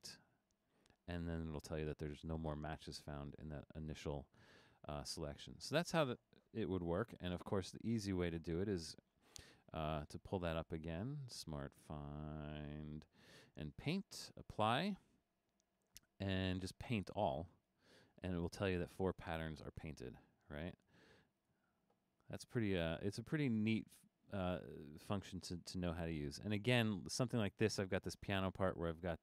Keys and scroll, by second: 6.6 super+z, 7.1 super+z, 7.6 super+z.